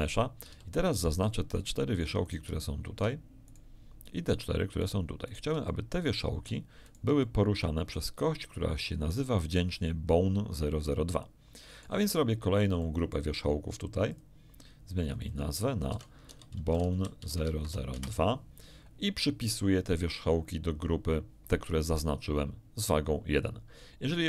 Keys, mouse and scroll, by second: 0.5 a, 0.9 right click, 1.5 shift+right click, 2.2 shift+right click, 2.5 shift+middle click, 3.4 shift+right click, 4.3 shift+right click, 4.7 shift+right click, 5.2 shift+right click, 5.6 shift+middle click, 6.8 shift+right click, 7.2-9.7 shift+middle drag, 10.0-10.3 scroll up 1, 11.0-13.3 middle drag, 14.1 click, 15.0 click, 15.9-17.6 typing, 17.9 Return, 22.7 click.